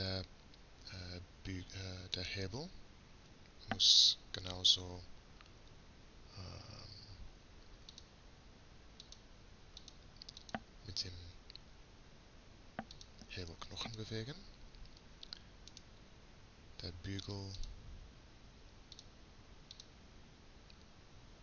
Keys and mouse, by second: 2.8-4.0 right drag, 4.1-6.0 right drag, 9.1-12.3 right drag, 13.9-16.4 drag, 16.4-17.6 right drag, 17.6-21.4 drag.